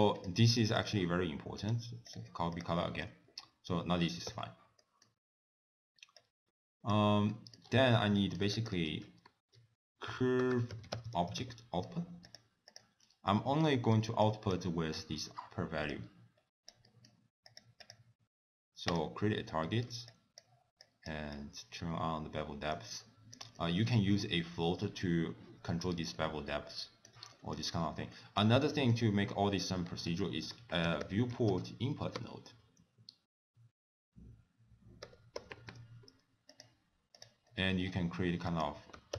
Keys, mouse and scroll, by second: 0.2-0.7 shift+click, 1.0 shift+click, 1.7 click, 2.5 click, 2.9 middle click, 3.1-3.8 scroll down 3, 4.4 n, 4.8 middle click, 5.3-6.2 scroll down 3, 6.2 click, 7.4 middle click, 7.7-8.6 scroll up 5, 8.2 middle click, 8.6 click, 8.9 ctrl+a, 13.0-13.4 scroll up 3, 13.4 middle click, 14.3 click, 16.0 click, 16.9 middle click, 17.5 click, 17.9 click, 19.0 click, 19.7 middle click, 20.2 click, 20.9 click, 21.4 click, 23.1 scroll down 1, 23.4 middle click, 26.2 middle click, 27.5 middle click, 27.8 scroll down 4, 28.2 middle click, 28.8 middle click, 29.3 scroll down 1, 30.2 ctrl+a, 37.5 middle click, 37.9-38.5 scroll up 4, 38.5 click.